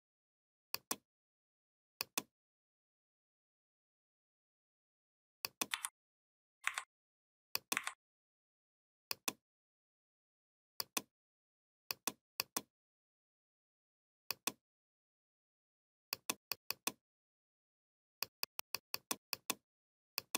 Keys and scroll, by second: 5.5 v, 6.4 Delete.